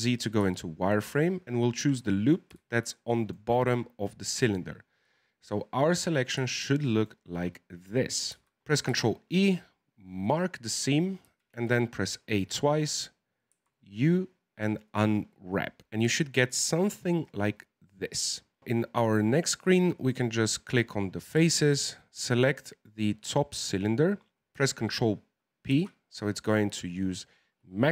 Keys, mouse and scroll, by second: 0.1 scroll up 3, 0.5-3.1 shift+middle drag, 3.1 alt+shift+right click, 3.7-4.5 scroll down 3, 4.5-6.2 middle drag, 6.2-6.5 scroll down 2, 6.5 shift+middle click, 7.1-8.3 scroll up 1, 8.3 z, 8.9 ctrl+e, 11.2 a, 11.5 a, 13.5 u, 15.7-16.2 scroll up 3, 16.2-17.0 scroll down 3, 18.6 right click, 20.0 click, 21.4 c, 25.7 ctrl+p.